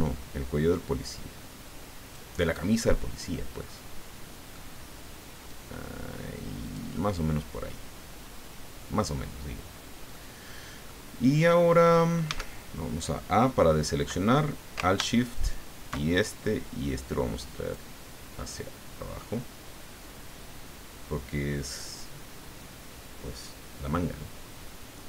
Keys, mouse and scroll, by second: 2.5 middle click, 3.9 click, 5.5-7.1 drag, 7.1 middle click, 7.5 click, 8.1-9.3 middle drag, 9.7 scroll down 1, 10.1 right click, 12.2 a, 15.3 alt+shift+right click, 17.0 click, 18.5-21.9 drag.